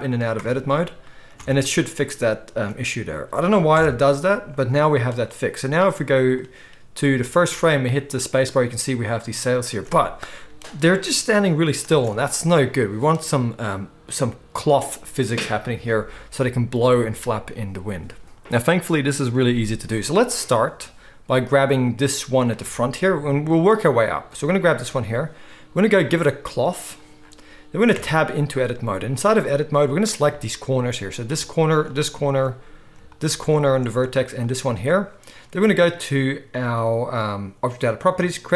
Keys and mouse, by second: 0.5 Tab, 1.4 alt+a, 2.5 ctrl+s, 3.7 KP_0, 5.4-22.5 drag, 7.2 space, 12.0 space, 22.5-26.2 shift+middle drag, 26.2-30.0 drag, 27.9 Tab, 30.0-34.4 shift+middle drag, 34.4 shift+click, 34.5-38.5 shift+middle drag.